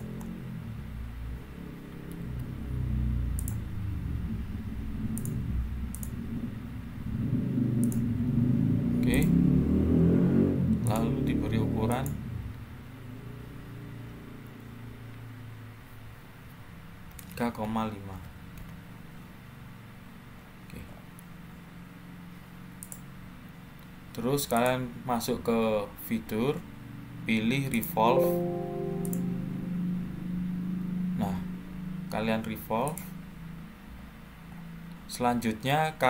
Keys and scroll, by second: 2.1 Escape, 16.8-18.5 typing.